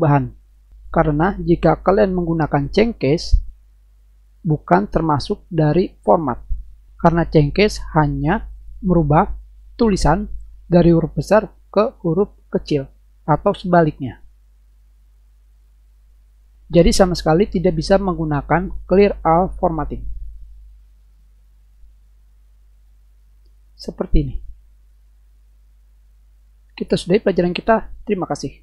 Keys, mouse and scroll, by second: 2.6 click, 4.6 click, 6.2 click, 14.2 click, 15.5 click, 18.8 click, 19.6 click, 20.7 click, 22.8 click, 23.9 click, 24.7 click, 25.2 click, 25.6 click.